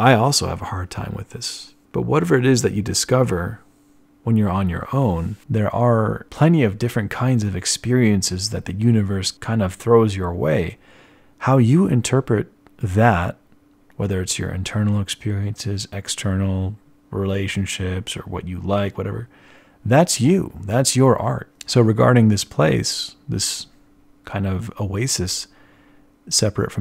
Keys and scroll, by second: 13.3 z, 15.0 z, 18.1-19.3 typing, 21.5 z, 26.6 z.